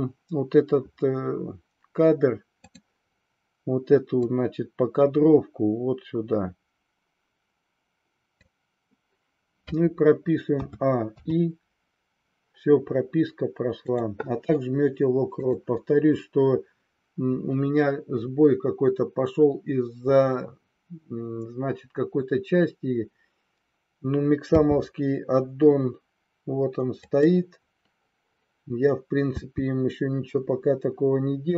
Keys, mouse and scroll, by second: 2.7 click, 4.3-8.4 drag, 10.6 a, 11.0 i, 13.8 click, 15.3 click, 24.4 n, 26.9 click, 29.3 n.